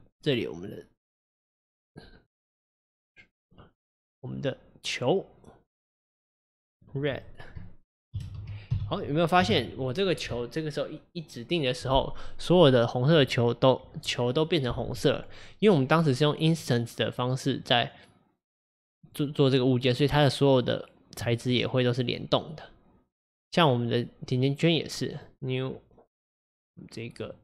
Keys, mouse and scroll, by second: 2.3-3.6 drag, 6.8-9.8 drag, 16.5 click, 17.3 click, 17.7 click, 19.1 click, 19.9 click, 21.5 click, 23.3 click, 25.1-26.2 drag.